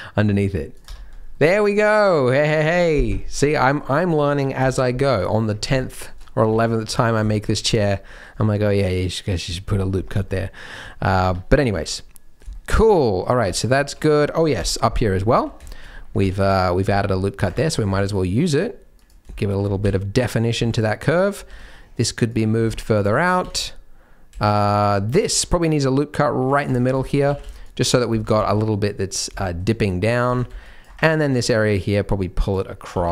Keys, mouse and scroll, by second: 0.8 Tab, 1.1-1.4 scroll down 2, 1.4 middle click, 2.4-3.0 scroll down 7, 3.1 shift+middle click, 3.4 scroll up 1, 3.5 middle click, 3.7 scroll down 1, 3.8-4.5 scroll up 2, 4.5-5.3 scroll up 1, 4.5 KP_3, 5.3-5.7 scroll up 1, 5.8 shift+middle click, 6.2 scroll up 1, 6.4 z, 6.9-7.9 scroll up 3, 7.3 shift+middle click, 7.6 Tab, 7.9-9.4 scroll down 2, 10.0 scroll down 4, 10.2 shift+middle click, 10.8 shift+middle click, 11.2 Tab, 11.5 z, 11.8 middle click, 12.5 shift+middle click, 12.8 middle click, 13.4 Tab, 13.8 shift+middle click, 13.9-14.5 scroll up 1, 14.5-15.2 scroll up 5, 14.5 KP_3, 15.2 z, 15.6 shift+middle click, 15.8-16.2 scroll up 4, 16.2 alt+a, 16.3 c, 17.9 g, 19.3 shift+middle click, 19.8 alt+a, 20.5 c, 21.4 c, 22.2 g, 22.5 scroll down 3, 22.7 shift+middle click, 23.3 alt+a, 24.4 shift+middle click, 24.5-25.1 scroll up 3, 25.2 ctrl+r, 27.0 shift+middle click, 27.2 alt+a, 27.4 c, 28.2 g, 29.4 shift+middle click, 29.8 scroll down 1, 30.2 alt+a, 30.4 c, 31.2 g, 32.9 g.